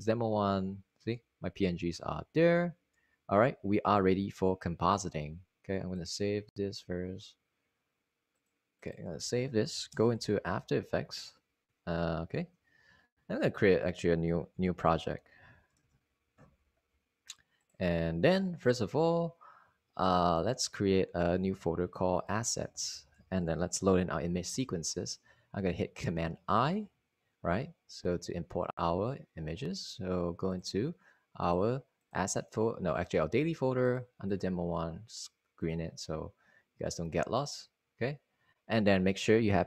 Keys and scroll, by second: 0.2 Return, 1.1 Right, 1.3 Down, 1.9 Right, 2.5 Down, 3.3 Right, 4.4 Down, 5.2 Down, 5.4 Down, 5.6 Down, 6.0 Down, 6.5 Return, 12.7 super+s, 13.2-14.2 typing, 15.8 ↻, 18.0 alt+super+n, 18.8-19.5 typing, 25.8-27.5 typing, 27.9 super+i.